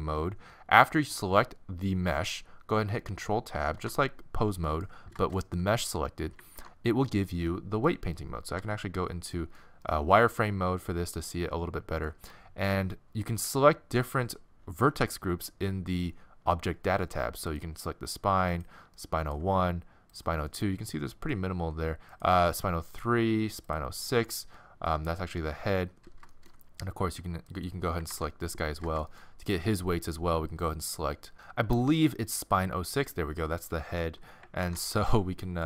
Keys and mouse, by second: 0.0-3.8 middle drag, 3.8 ctrl+Tab, 6.5 ctrl+Tab, 8.6 z, 17.5-28.1 middle drag, 28.1 ctrl+Tab, 29.4-31.3 drag, 32.4-32.9 drag, 32.9-34.4 middle drag, 34.6 ctrl+Tab.